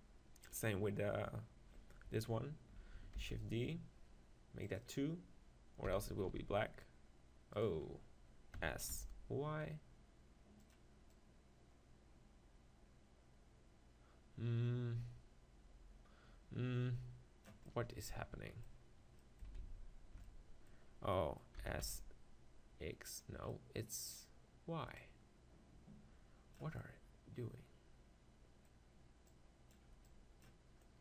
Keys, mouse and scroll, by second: 0.5-2.3 right drag, 3.2 shift+d, 4.1-6.4 drag, 4.8 right click, 5.9 s, 8.6 s, 10.7-13.0 drag, 17.7-19.3 middle drag, 19.6 ctrl+z, 21.6 s, 23.2 right click, 23.5-27.0 drag, 23.5-25.6 middle drag, 25.0 right click, 26.8-28.2 middle drag, 29.3-31.0 drag, 30.8-31.0 middle drag.